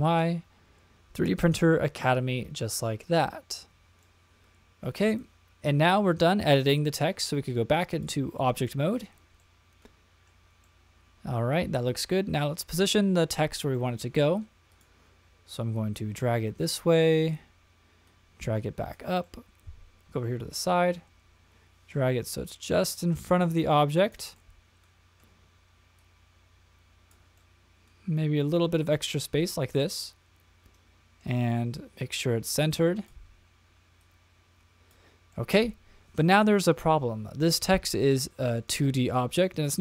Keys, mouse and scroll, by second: 4.0 middle click, 7.9-8.7 drag, 9.4 middle click, 10.6-12.2 middle drag, 13.7 middle click, 14.7 click, 15.7-17.3 drag, 18.0-18.9 drag, 19.2-20.2 middle drag, 20.9-24.1 drag, 24.3-25.2 middle drag, 25.9-27.1 drag, 27.4-28.8 middle drag, 29.7-31.2 middle drag, 32.1-33.1 drag, 34.0 click, 35.3-36.3 middle drag, 38.1-38.6 shift+middle drag, 38.8 middle click, 39.7 click.